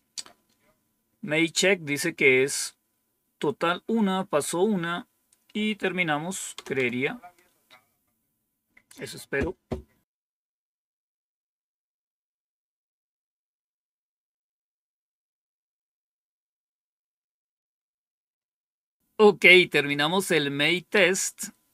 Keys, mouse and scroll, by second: 6.5 Return, 6.7 Return, 19.0 Up, 19.0 Down, 20.8 Up.